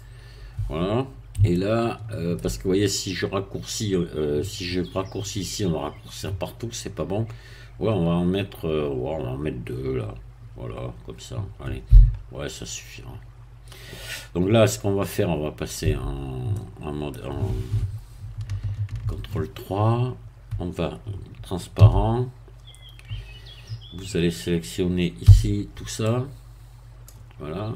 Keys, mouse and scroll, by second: 1.5-2.7 shift+middle drag, 2.7 shift+scroll up 1, 7.4-9.0 scroll down 1, 12.3 scroll up 1, 15.9 Tab, 16.5-17.6 middle drag, 18.8 ctrl+3, 19.9 scroll up 2, 21.8 z, 25.3 c, 26.1-27.3 drag.